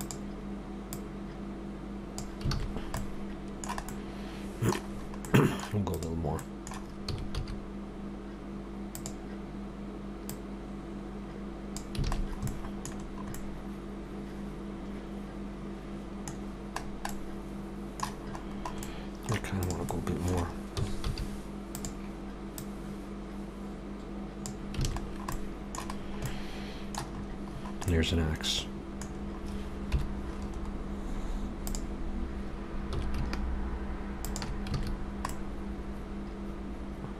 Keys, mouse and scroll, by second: 1.0 click, 2.6 alt+a, 2.7 scroll down 3, 3.0 middle click, 4.9-5.4 scroll up 2, 5.3 middle click, 5.9 click, 6.4 middle click, 7.1 s, 10.3 click, 12.1 alt+a, 12.2-13.1 scroll down 5, 12.5 middle click, 13.4 middle click, 16.4 scroll down 1, 17.1 middle click, 17.1 scroll down 2, 18.2-18.7 scroll up 5, 18.8 middle click, 19.6 click, 19.9 middle click, 20.8 s, 22.6 click, 24.9 alt+a, 25.0-25.5 scroll down 3, 25.3 middle click, 26.0-26.5 scroll down 2, 26.3 middle click, 27.1-27.6 scroll up 7, 27.9 middle click, 29.1 scroll down 3, 29.9 KP_7, 30.7 scroll up 3, 31.6 click, 32.9 s, 34.8 alt+a, 35.0-35.3 scroll down 2, 35.3 middle click.